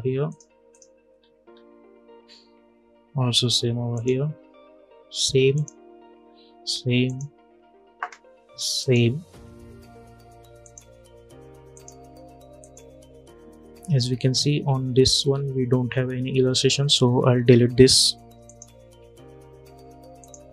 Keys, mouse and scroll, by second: 1.2-3.0 scroll down 1, 3.6 click, 18.1 click.